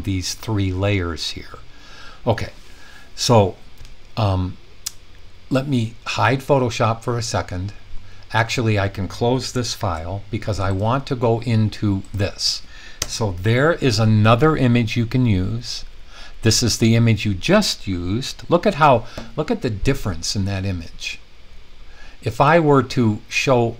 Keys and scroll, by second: 9.7 super+w, 16.0 Down.